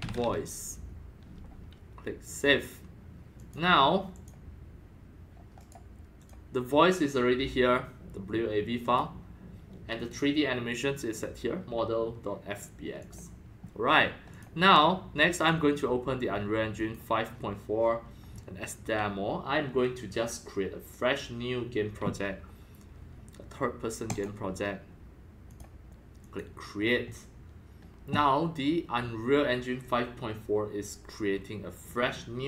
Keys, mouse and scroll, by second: 0.0-0.7 typing, 2.3 click, 2.4 click, 3.3 click, 3.6 click, 4.1 click, 5.6 right click, 6.2 click, 7.4-8.8 drag, 8.8 click, 9.1-11.8 drag, 13.0 click, 14.3 click, 15.3 click, 16.8 click, 20.2-22.0 drag, 24.1 click, 25.5 click, 26.2 click.